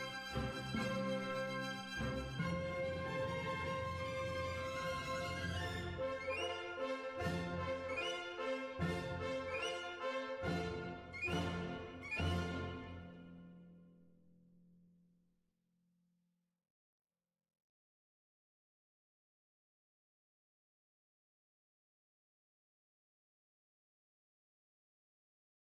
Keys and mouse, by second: 0.1 middle click, 0.6 middle click, 1.7 click, 1.7 right click, 2.5 middle click, 3.9 middle click, 5.1 middle click, 6.2 right click, 6.6 middle click, 7.4 Tab, 10.1-11.3 drag, 11.3 middle click, 11.7-15.5 drag, 15.5-18.9 middle drag, 19.4-21.1 middle drag, 21.1-22.9 drag, 24.1 Tab.